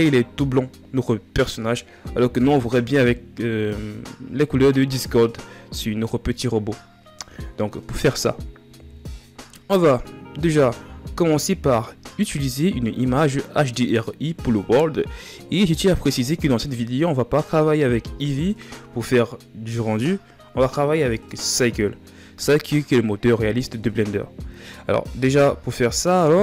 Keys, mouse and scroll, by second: 8.5 KP_1.